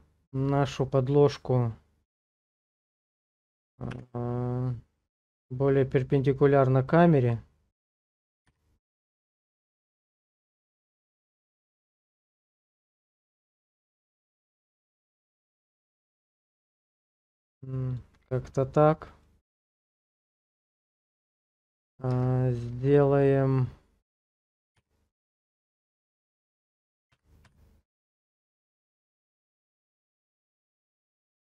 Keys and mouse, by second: 2.2 click, 3.9 r, 7.3 click, 8.5 g, 11.5-13.3 drag, 13.3 g, 17.9 click, 19.2 middle click, 20.0 shift+middle click, 21.0 middle click, 22.1 Tab, 22.6 click, 23.0-24.1 middle drag, 24.8 g, 25.2 x, 25.4 x, 27.1 y, 27.5 y, 30.8 click, 31.4 shift+middle click.